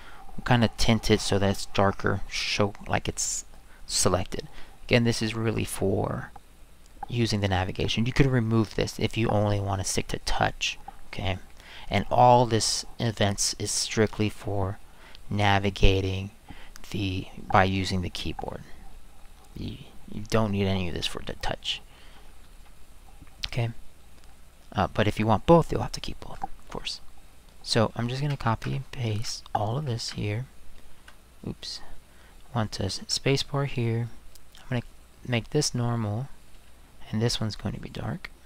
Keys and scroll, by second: 29.1 ctrl+shift+c, 30.0 ctrl+v, 30.9 space, 33.0 space.